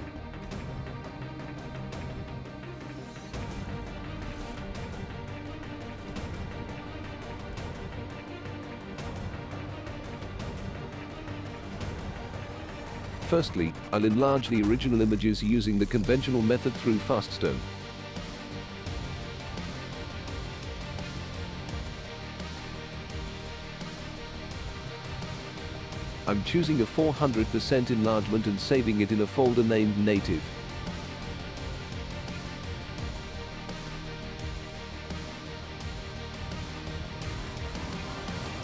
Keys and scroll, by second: 6.6 Escape, 10.5 Return, 38.4 ctrl+a.